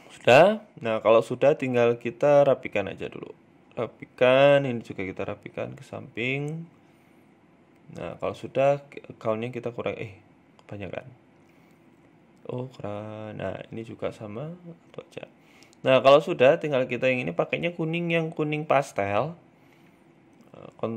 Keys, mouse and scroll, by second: 0.4 middle click, 0.6-1.0 scroll down 5, 1.0 middle click, 1.3 scroll up 2, 1.5 middle click, 2.0 right click, 2.2 middle click, 2.6 scroll up 2, 2.8 shift+middle click, 3.8 g, 5.4 scroll down 3, 5.6 middle click, 7.7 click, 8.2 click, 9.5 middle click, 10.5 click, 10.7 click, 11.2 click, 12.6 right click, 13.7 click, 14.4 scroll down 2, 14.6 middle click, 15.5 scroll up 1, 16.0 right click, 16.6 shift+right click, 16.9 middle click, 17.5 shift+right click, 19.7 ctrl+j, 20.4 ctrl+z.